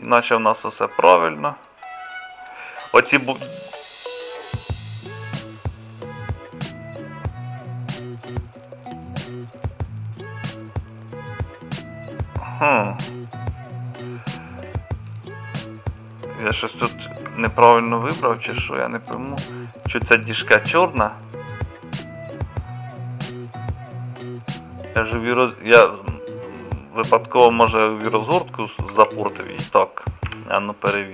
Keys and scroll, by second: 17.2 Tab, 18.0 Tab.